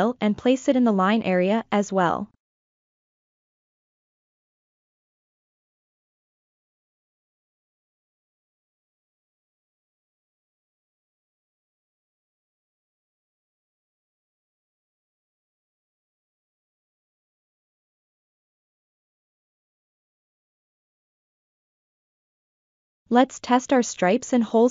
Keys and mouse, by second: 1.5 s, 1.9-3.0 drag, 3.7 g, 4.1-4.7 drag, 4.9 ctrl+middle click, 5.5 ctrl+middle click, 6.0 s, 6.4-7.5 drag, 7.6 g, 7.9-9.0 drag, 9.5 ctrl+middle click, 10.1 middle click, 11.5 F7, 12.2-13.2 ctrl+middle drag, 13.5-18.6 middle drag, 18.7 ctrl+middle click, 19.1 shift+middle click, 19.5 middle click, 20.4 ctrl+middle click, 24.2 l, 24.4 click.